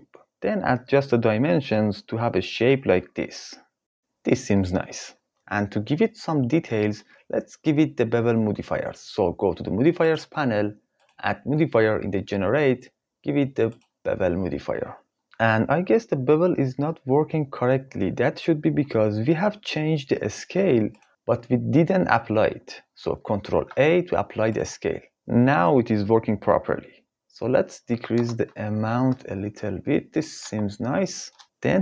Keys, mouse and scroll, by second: 0.7 click, 1.9 click, 3.1 click, 11.8-14.8 drag, 20.5 click, 23.5 ctrl+a, 26.4 click, 28.2-29.8 drag.